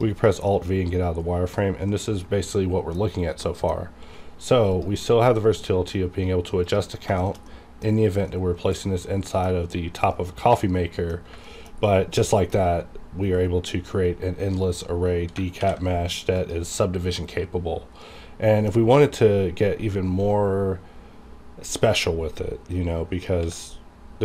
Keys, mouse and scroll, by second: 0.2 scroll down 1, 0.4-3.4 middle drag, 3.9 scroll up 1, 4.0 q, 4.7 click, 5.1-5.4 scroll up 1, 6.6 click, 6.9 scroll down 1, 7.2 shift+middle click, 7.9 scroll up 1, 8.2-11.4 middle drag, 11.7 shift+scroll down 1, 11.8-15.0 middle drag, 15.4 alt+Num_Lock, 15.4 middle click, 15.6 alt+v, 16.4 click, 18.0-23.4 middle drag, 23.4 x.